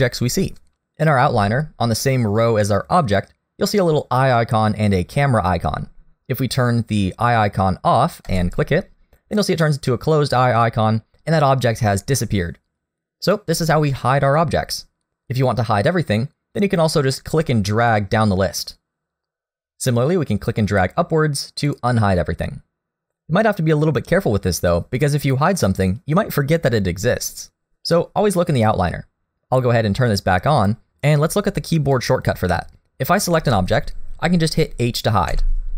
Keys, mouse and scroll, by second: 8.3 click, 17.9 click, 20.8 click, 25.0 click, 25.7 middle click, 30.1 click, 31.3 middle click, 33.2 click, 35.3 h.